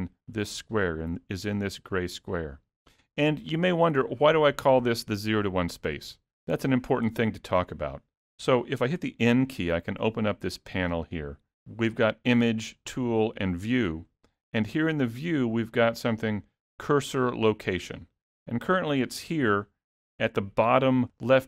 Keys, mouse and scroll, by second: 9.1 n, 12.7 click, 13.4 click, 20.1 shift+middle click.